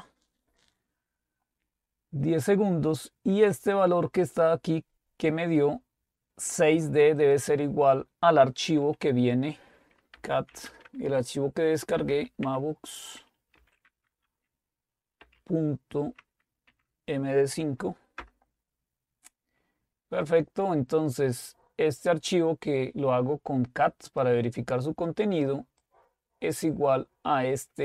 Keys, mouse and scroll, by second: 3.6-7.1 drag, 7.6 click, 10.0-13.8 typing, 15.2 typing, 16.6-18.2 typing, 21.5-25.0 drag, 26.8-27.8 drag.